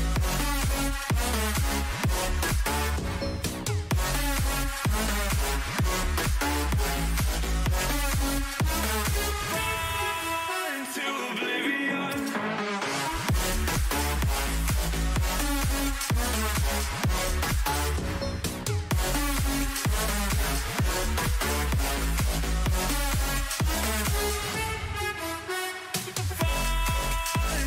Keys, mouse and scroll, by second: 4.6 a, 5.5 b, 6.9 g, 10.1 a, 12.0 middle click, 13.6 b, 14.2-15.3 drag, 14.2-16.2 right drag, 16.2-19.8 drag, 16.8-18.9 middle drag, 24.6 a, 25.5 b, 26.7-27.6 drag.